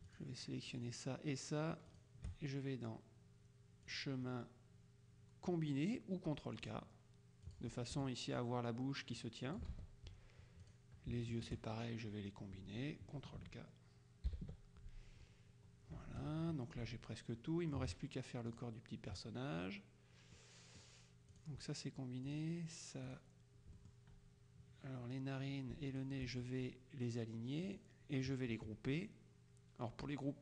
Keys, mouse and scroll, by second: 0.2 shift+click, 2.0 click, 4.0 click, 6.7 click, 7.5 click, 8.0 F1, 8.5-10.1 drag, 9.8 ctrl+z, 10.7-11.9 drag, 14.4 ctrl+k, 16.3 KP_Subtract, 17.5 middle click, 18.6 click, 20.5 middle click, 22.3 click, 23.1 click, 23.8 middle click, 26.1 shift+click, 27.8 click.